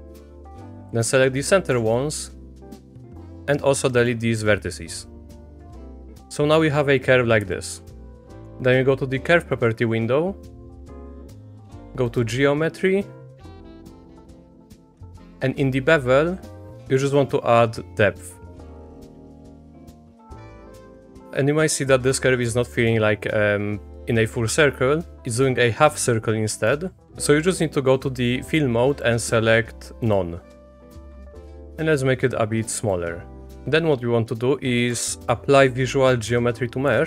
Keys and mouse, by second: 0.4 ctrl+z, 0.8 x, 1.7 Escape, 2.0 click, 2.8 x, 5.4 click, 7.5 shift+click, 12.1 click, 17.3-19.2 drag, 19.6 middle click, 20.3 middle click, 22.2 middle click, 22.7 middle click, 25.4 middle click, 26.6 middle click, 29.0-30.1 drag, 31.6-32.9 drag, 33.4 shift+Tab, 33.4 shift+click, 34.9 F3.